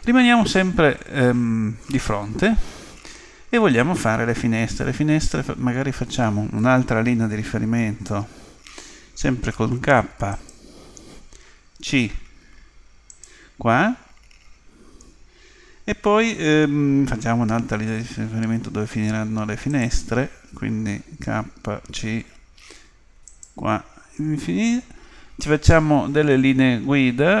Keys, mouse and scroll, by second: 0.0 KP_3, 8.7 k, 17.4 k.